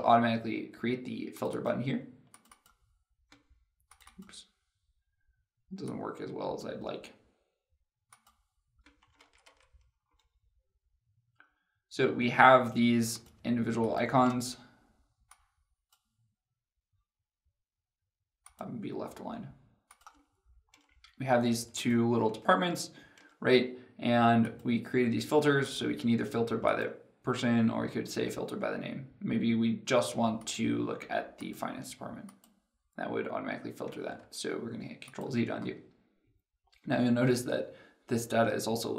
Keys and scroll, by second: 9.1 ctrl+z, 10.0 ctrl+z, 34.1 ctrl+z.